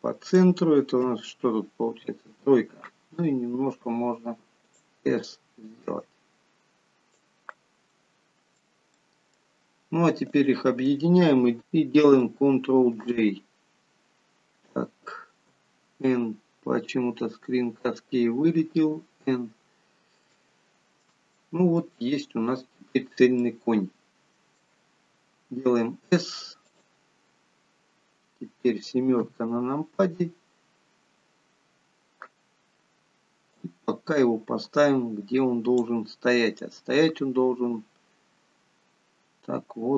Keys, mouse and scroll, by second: 19.1 n, 20.6 shift+middle click, 21.6 middle click, 23.7 middle click, 25.9 s, 29.5 KP_7, 30.9-32.4 scroll down 3, 33.8 click, 36.9 click.